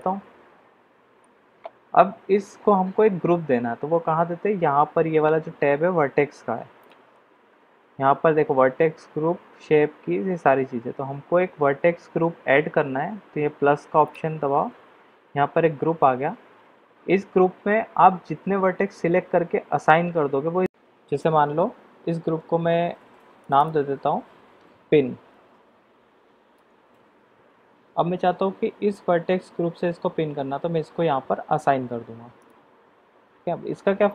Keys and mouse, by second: 0.0-1.3 middle drag, 14.0 click, 23.4 click, 23.7-27.2 drag, 32.3 click.